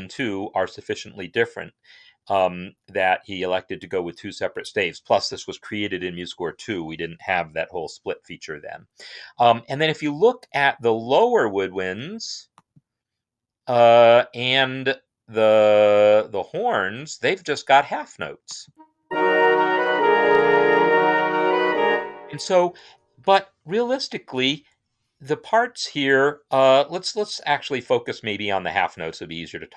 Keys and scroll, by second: 18.9 space, 21.6 space.